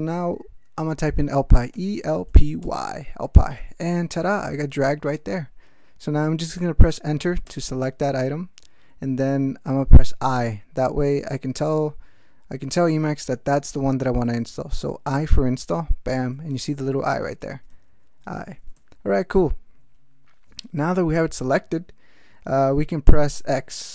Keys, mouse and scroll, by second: 1.5-3.1 typing, 7.4 Return, 15.0 i, 16.8 ctrl+p, 17.2 ctrl+space, 17.5 ctrl+f, 18.2 ctrl+g, 18.7 ctrl+alt+m.